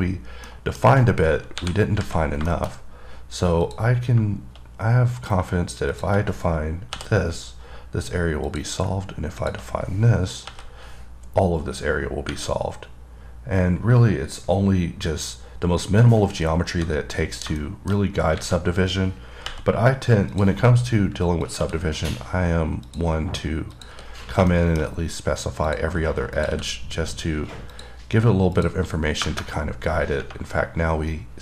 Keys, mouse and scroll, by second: 0.5 scroll down 1, 0.7 middle click, 2.8 middle click, 3.0 scroll up 2, 3.9 click, 6.2 click, 8.8 click, 9.7 click, 12.2 scroll down 3, 12.5 scroll up 1, 13.7-15.6 scroll down 1, 15.8-17.1 scroll up 5, 17.9 middle click, 18.2 scroll down 1, 20.6 click, 21.7 click, 23.1 click, 24.0 click, 24.8 middle click, 24.8 scroll, 24.9 scroll down 1, 26.0 click, 26.6 click, 28.0 click, 28.8 click, 30.5-31.4 scroll down 2.